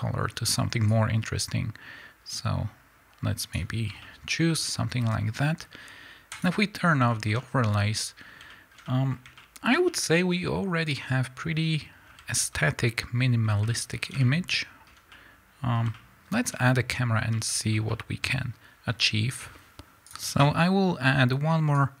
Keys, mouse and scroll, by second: 3.8 scroll down 2, 4.0-6.2 middle drag, 4.4-6.2 scroll up 2, 6.2 click, 7.0-19.7 shift+middle drag, 19.7 KP_Enter, 20.1-22.0 drag.